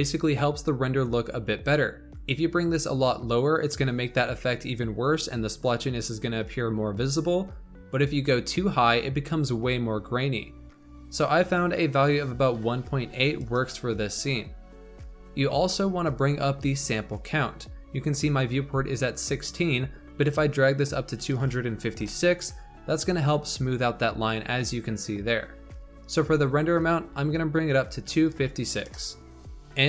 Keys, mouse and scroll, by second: 2.0-5.1 drag, 7.8-10.9 drag, 11.0-14.0 drag, 15.3-19.0 scroll up 14, 19.2-22.2 drag, 26.3-29.3 drag, 29.5 shift+middle click.